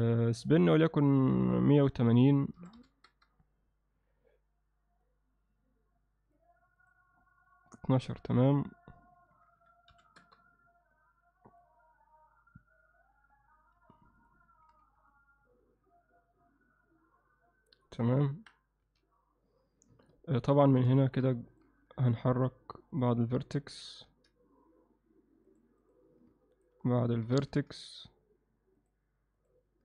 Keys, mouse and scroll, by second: 0.3 click, 1.4-4.8 drag, 5.0-6.4 drag, 6.8-8.0 drag, 8.4-11.1 drag, 11.5 click, 14.7 z, 15.1-17.8 alt+middle drag, 18.3 KP_1, 18.8 z, 20.1 ctrl+alt+middle click, 21.0 shift+middle click, 21.4 ctrl+alt+middle click, 22.0 click, 22.4 click, 23.0 shift+click, 23.8 g, 26.6 click, 27.3 g, 29.4 click.